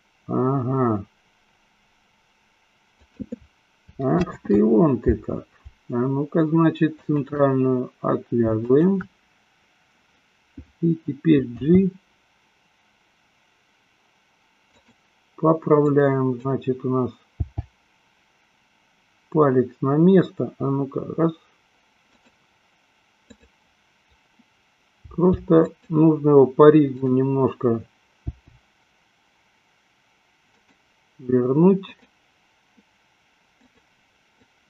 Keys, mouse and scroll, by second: 5.0 ctrl+z, 6.9 shift+click, 8.9 shift+click, 11.9 g, 15.2 drag, 16.2 click, 17.9 g, 22.6 click, 23.5-24.7 drag, 25.5 g, 26.1 click, 27.2 click, 28.7 g, 32.2 click, 33.9 click.